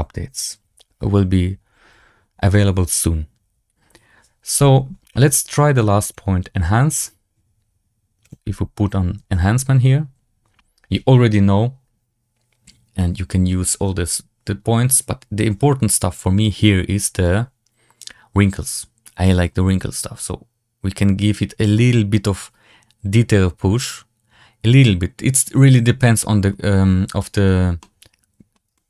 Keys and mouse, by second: 5.6 click, 6.0-16.4 drag, 19.3-25.3 drag, 25.9-26.4 middle drag, 27.7 middle click, 28.6 shift+middle drag.